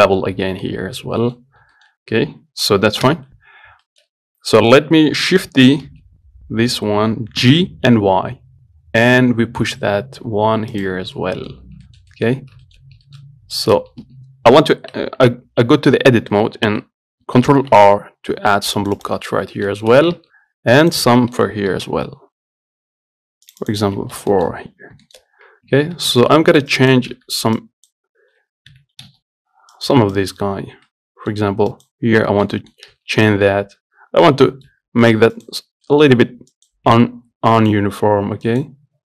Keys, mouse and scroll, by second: 0.9 middle click, 1.7 scroll up 1, 2.0 shift+middle click, 2.8-3.3 scroll down 1, 3.3 KP_7, 3.7-4.1 scroll down 1, 4.1 shift+middle click, 4.3-5.8 scroll up 1, 6.1 shift+d, 11.4 middle click, 11.8-12.1 scroll up 1, 12.1 shift+middle click, 12.7 scroll down 2, 12.9 shift+middle click, 13.1 scroll up 3, 13.3 shift+middle click, 13.6 scroll down 1, 13.8 shift+middle click, 14.0 scroll up 1, 14.3 Tab, 17.8 ctrl+r, 19.6 scroll down 2, 20.0 shift+middle click, 20.3 scroll down 1, 20.4 Tab, 21.1 click, 21.3 Tab, 22.0 ctrl+r, 24.1 Tab, 24.6 shift+middle click, 24.8-25.3 scroll up 7, 25.3 shift+middle click, 25.6 scroll down 1, 25.9 Tab, 26.2-26.9 scroll up 2, 26.9 click, 27.4 z, 27.8 click, 28.9 g, 30.4 click, 31.0 scroll up 1, 31.1 middle click, 31.9 click, 32.3 scroll up 3, 32.5 shift+middle click, 33.1 z, 33.7-34.9 middle drag, 34.9 g, 35.9 scroll down 3, 36.1 middle click, 36.7 click, 37.1 g, 38.7 click.